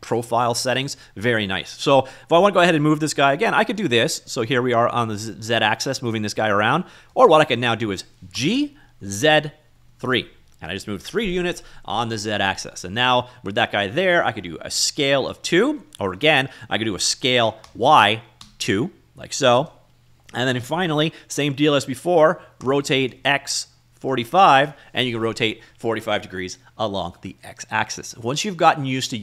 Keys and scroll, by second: 8.8 g, 9.7 z, 10.6 3, 15.4 s, 15.9 2, 17.6 s, 18.2 y, 19.1 2, 23.1 r, 23.6 x, 24.5 4, 24.7 5.